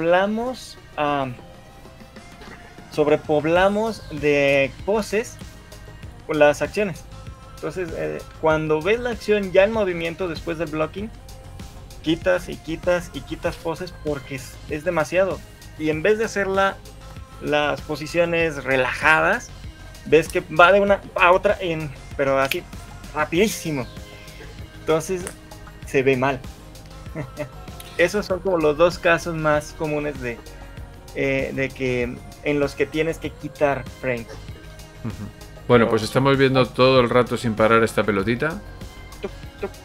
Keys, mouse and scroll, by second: 38.1 shift+middle click, 38.7-39.1 scroll up 3, 39.5 shift+middle click.